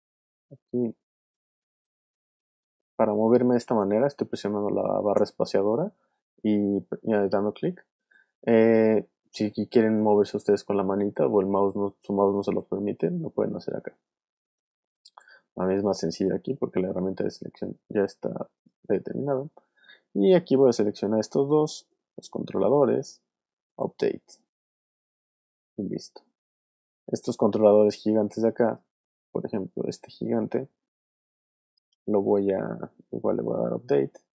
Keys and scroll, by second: 0.5 space, 5.1 space, 15.2 space, 26.9 space.